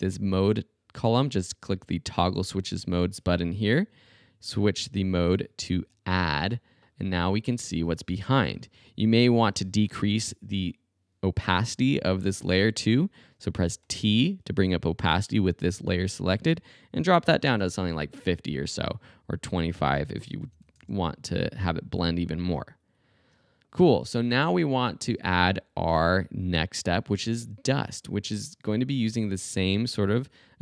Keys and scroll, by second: 13.8 t, 16.9-17.8 typing, 20.2-21.1 typing.